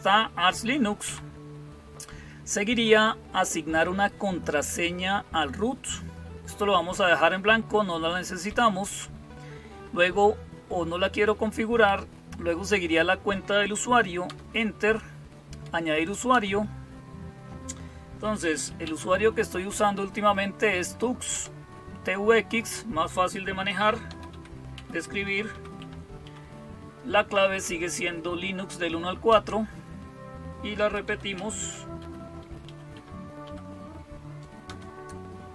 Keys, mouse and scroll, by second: 0.9 Down, 8.3 Down, 11.0 Up, 11.7 Down, 14.1 Return, 16.1 Return, 18.1-19.2 typing, 21.2 Return, 23.1-26.6 typing, 29.1 Return, 30.4-33.7 typing, 34.5 Return.